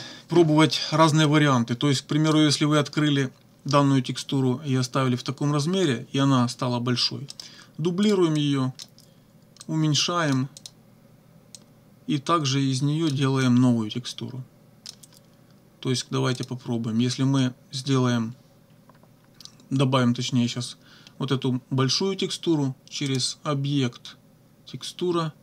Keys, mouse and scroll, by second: 1.3-2.5 drag, 7.3 right click, 8.1 click, 8.4 click, 9.7 click, 10.6 click, 11.6-13.3 drag, 13.5-15.1 drag, 16.4 click, 23.1 click.